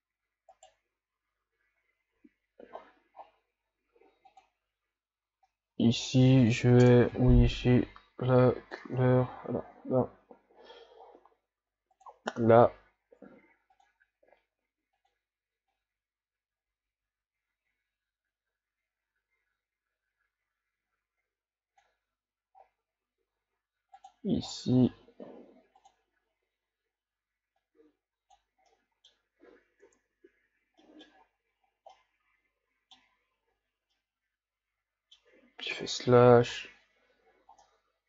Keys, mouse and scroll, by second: 0.7 right click, 5.6 click, 12.0 click, 12.5 scroll down 2, 15.1 click, 24.1 click, 24.5 scroll down 6, 27.7 click, 28.8-29.8 middle drag, 29.8 KP_Divide, 31.0 middle click, 31.2-31.8 scroll up 4, 31.8 scroll down 2, 32.0-35.9 middle drag, 35.9 KP_Divide, 36.9 a, 37.5 scroll down 3, 37.7-38.0 middle drag.